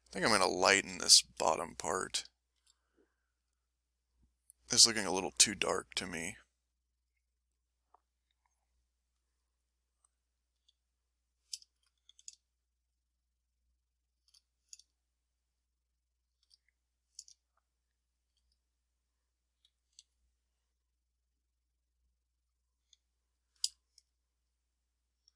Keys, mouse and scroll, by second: 1.4 ctrl+shift+click, 2.3 click, 3.3 click, 4.0 click, 4.4 click, 5.0 click, 5.7 click, 6.2 click, 6.9 click, 7.9 ctrl+shift+click, 8.9 ctrl+shift+click, 9.7 ctrl+shift+middle click, 10.5 s, 12.0 a, 12.5 shift+click, 13.2 shift+click, 13.7 shift+click, 14.0 shift+click, 14.4 shift+click, 15.2 shift+click, 15.8 shift+click, 16.2 shift+click, 17.6 shift+click, 18.1 shift+click, 19.7 s, 20.0 s, 21.1-22.2 drag, 22.8 click, 23.7-25.3 ctrl+drag.